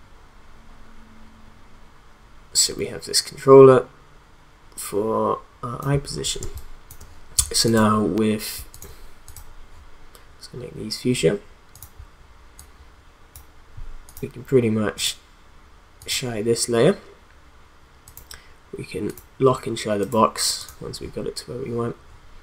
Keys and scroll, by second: 6.4 space.